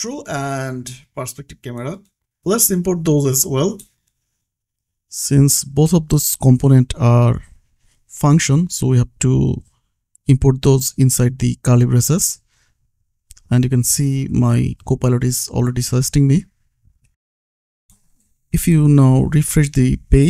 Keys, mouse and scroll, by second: 0.6 Return, 1.1-2.9 typing, 5.8-7.3 typing, 7.8 Down, 8.5 Return, 9.9 click, 11.0 ctrl+c, 11.8 click, 12.9 space, 13.3 shift+p, 13.7 r, 15.1 r, 15.5 Return, 16.4 click, 16.9 ctrl+s, 17.3 click.